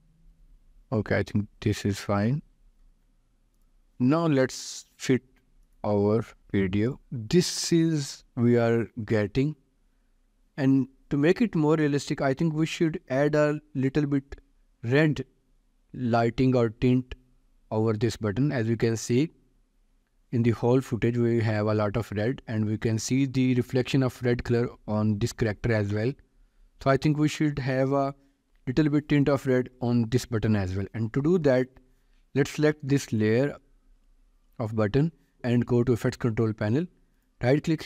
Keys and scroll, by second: 13.1 ctrl+s.